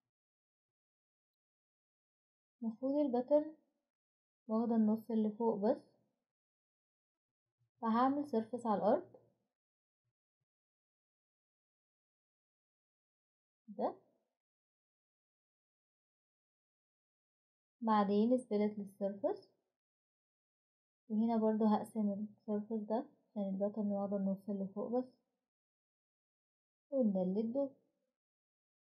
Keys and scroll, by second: 7.2 typing, 9.9 typing, 11.4 typing, 23.2 Escape, 25.2 Delete, 27.9 Delete, 28.5 Delete.